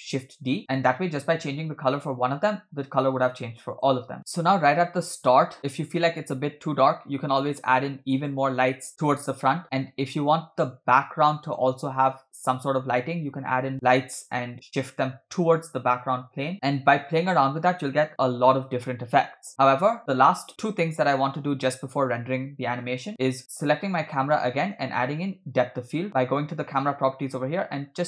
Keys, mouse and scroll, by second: 3.7 click, 4.2 space, 4.9-8.4 drag, 10.3-12.2 drag, 19.5 space, 20.0 space, 23.1 click, 24.6 click, 25.9 click.